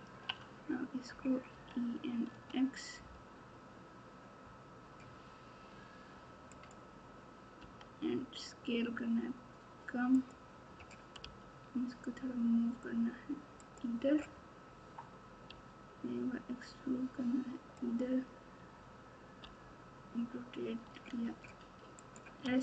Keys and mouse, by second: 1.5 e, 7.5 s, 11.2 g, 15.4 e, 19.4 r.